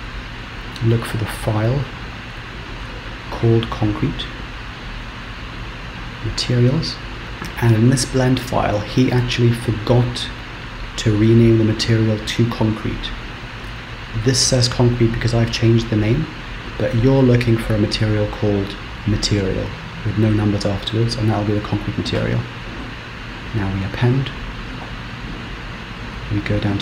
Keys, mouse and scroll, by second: 26.7 click.